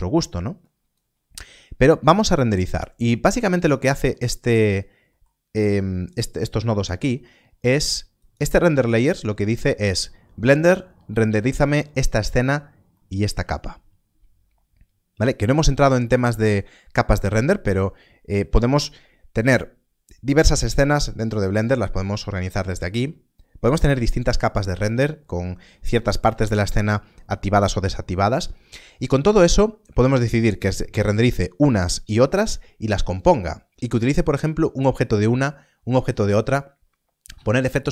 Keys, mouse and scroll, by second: 0.6 click, 3.4 middle click, 6.0 right click, 6.5 middle click, 7.3-8.1 scroll up 1, 8.1 click, 12.9 click, 13.3-13.7 scroll up 1, 17.7-19.1 scroll up 1, 19.1-21.0 scroll down 1.